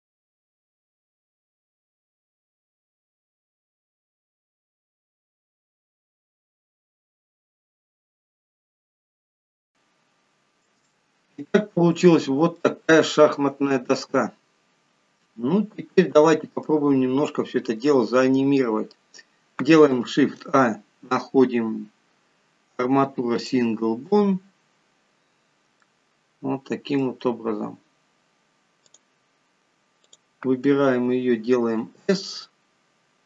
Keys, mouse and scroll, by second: 0.2 click, 0.7 click, 1.3 ctrl+z, 1.5 click, 2.0 click, 2.5 click, 2.7 click, 2.9 click, 3.1 click, 3.3 click, 3.6 click, 3.9 click, 4.0 click, 4.4 click, 4.7 click, 4.9 click, 5.2 click, 5.5 click, 5.8 click, 5.9 click, 6.2 click, 6.5 click, 6.6 click, 7.0 click, 7.4-8.0 click, 7.7 click, 9.1 middle click, 9.4 scroll up 3, 9.5 middle click, 9.6 shift+middle click, 9.7 middle click, 11.2 shift+middle click, 25.7 scroll up 3, 26.1 middle click, 27.7 scroll down 2, 29.3 click, 30.3 click, 32.1 s.